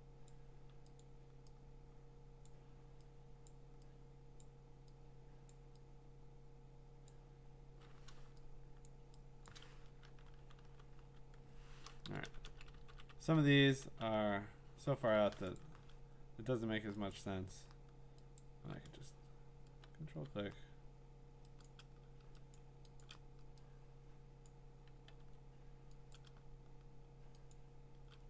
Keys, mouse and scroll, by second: 0.3 click, 1.0 click, 2.5 click, 3.5 click, 4.4 click, 5.5 click, 7.1 click, 8.4-9.1 typing, 8.7 click, 8.8 click, 9.5 click, 10.6 b, 12.0-14.1 typing, 15.6-17.1 drag, 18.4 shift+click, 20.1 x, 21.6 click, 22.5 shift+click, 23.0 click, 24.5 click, 25.2 x, 26.1 click, 27.5 shift+click.